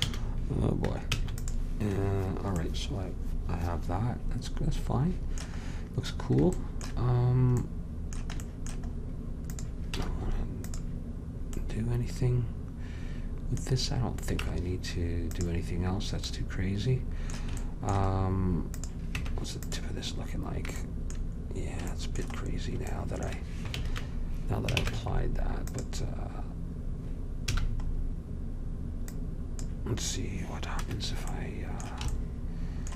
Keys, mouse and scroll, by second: 0.1 a, 1.2 ctrl+s, 7.2-9.0 middle drag, 9.6-11.5 drag, 10.1 Tab, 11.7-13.2 middle drag, 14.5 Tab, 18.9-20.3 drag, 19.3 Tab, 20.7 middle click, 24.8 ctrl+Tab, 25.9 ctrl+Tab, 27.6 c, 31.6-32.8 middle drag.